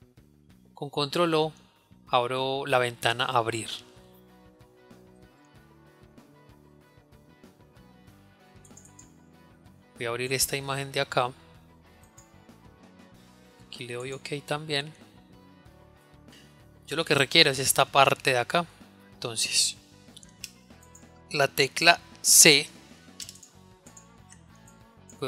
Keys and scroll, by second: 1.7 ctrl+o, 21.8 c, 22.3 c.